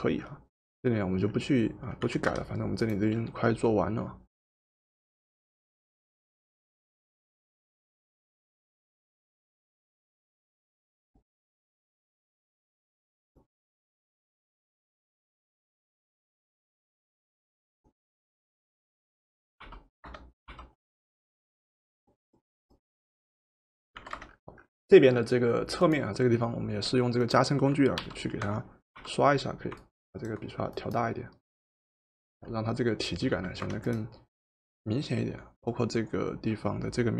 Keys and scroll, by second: 2.1 v, 19.6 o, 20.4 o, 24.1 v, 28.0 o, 29.1 o, 33.3 v.